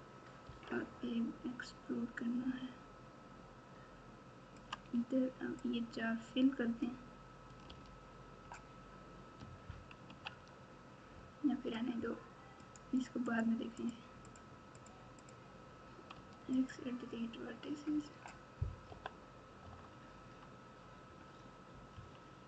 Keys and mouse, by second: 0.4 e, 5.6-6.8 drag, 7.6 f, 10.0 ctrl+z, 12.6 click, 13.7 click, 14.2 click, 14.7 click, 15.2 click, 16.1 x, 18.8 KP_7, 19.6 KP_9, 21.9 KP_3.